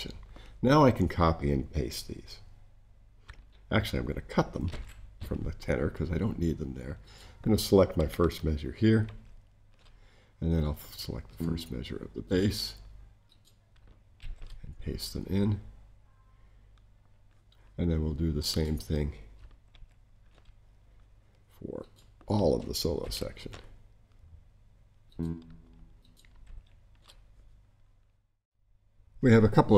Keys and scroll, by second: 4.6 super+x, 9.0 super+v, 14.2 super+v, 19.7 super+v, 23.0 super+v, 26.4 super+v.